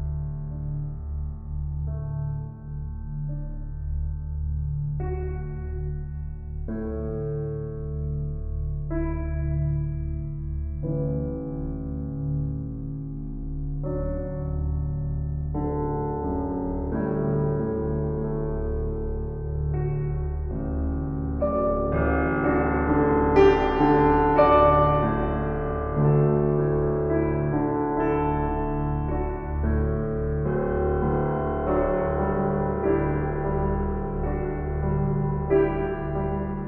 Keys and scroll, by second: 1.7 shift+s, 4.8 shift+s, 13.9 s, 16.2 shift+s, 20.8 s, 25.7 s.